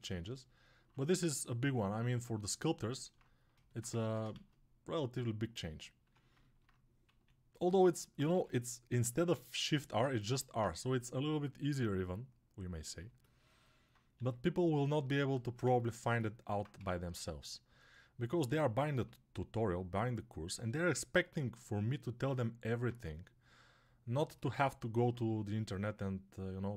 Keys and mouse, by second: 3.8 ctrl+Tab, 4.2 shift+a, 5.9 Tab, 5.9-8.2 alt+drag, 7.2 s, 8.2-21.8 middle drag, 8.2 g, 10.4 s, 14.1 g, 21.8-26.7 alt+drag.